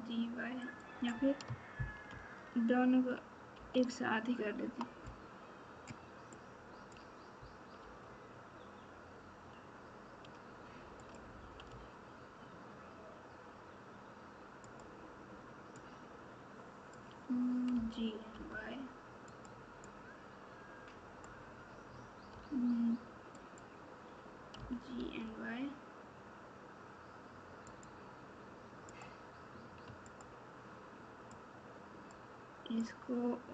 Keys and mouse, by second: 2.1 ctrl+z, 6.3 click, 6.5 click, 7.8 e, 11.6 e, 16.0 click, 17.7 g, 20.0-21.2 drag, 22.3 g, 31.7 shift+click, 32.8-33.5 shift+drag.